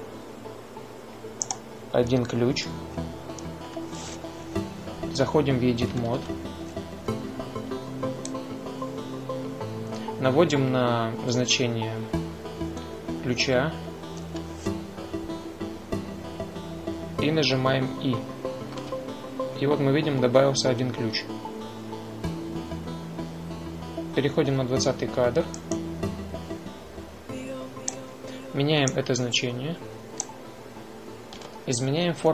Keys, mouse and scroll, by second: 0.6-4.6 drag, 7.0 Tab, 19.6 |, 23.4-25.9 right drag, 26.4 right click, 27.5-31.4 drag, 31.4 ctrl+z, 32.1 a.